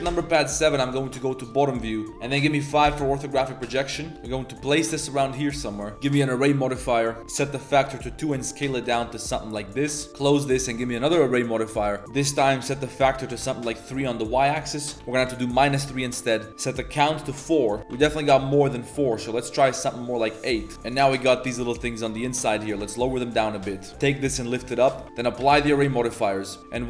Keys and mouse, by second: 0.0 shift+KP_7, 1.1 shift+click, 2.8 KP_5, 3.6 shift+middle click, 3.9 z, 4.1 Tab, 4.1 g, 5.5 Tab, 5.9 click, 7.2-10.1 typing, 10.1 click, 10.3-10.9 drag, 11.8-13.3 drag, 12.0 Tab, 12.0 0, 14.3 click, 19.4 click, 19.6 click, 20.0 click, 20.7 shift+g, 21.6-22.1 drag, 22.3 click, 22.6 g, 23.8-24.7 typing, 24.3 Tab, 24.8 click, 25.4 ctrl+a, 25.8 ctrl+a.